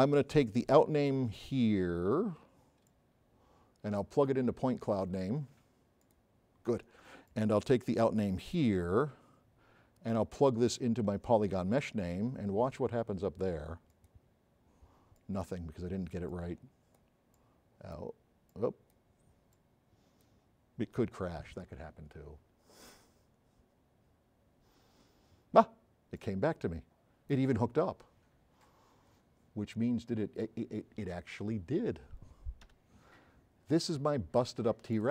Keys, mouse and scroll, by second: 1.5 scroll up 2, 1.7 middle click, 2.9-4.2 drag, 6.1 click, 14.0 click, 15.2 click, 16.3 click, 17.4-18.0 drag, 18.6-19.0 drag, 19.6 click, 29.6-30.2 scroll up 4, 30.5 scroll down 2, 31.9 scroll down 2, 32.7 h, 33.4-33.7 scroll up 2, 33.9 scroll down 2.